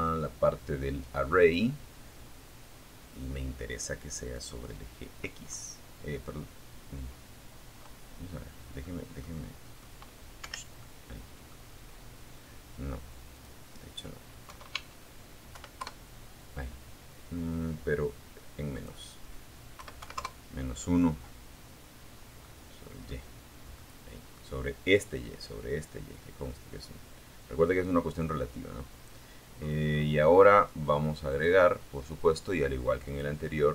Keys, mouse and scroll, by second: 2.5 click, 7.0-8.2 drag, 8.6 Escape, 9.0 click, 11.5 click, 12.7 KP_0, 12.9 Tab, 13.8 KP_1, 13.9 KP_Enter, 16.9 click, 17.9 KP_Subtract, 18.2 KP_1, 18.4 KP_Enter, 20.3 scroll down 2, 20.6 click, 21.9 click, 27.7-28.4 scroll down 2, 29.5 click, 31.3 click, 32.3-32.9 scroll down 4.